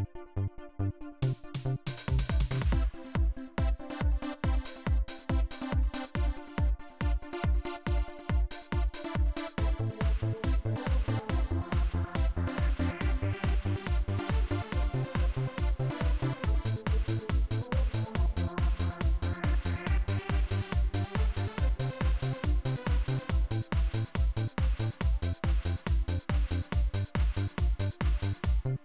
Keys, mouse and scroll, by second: 4.3 click, 7.0 click, 8.1-8.8 drag, 9.8-11.1 drag, 18.1-19.4 drag, 25.5 click, 26.3-28.5 drag.